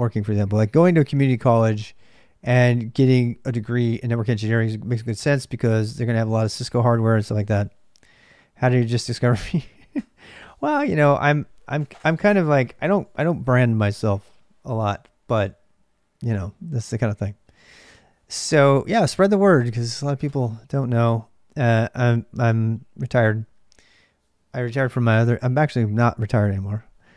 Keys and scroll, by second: 0.0-27.1 typing.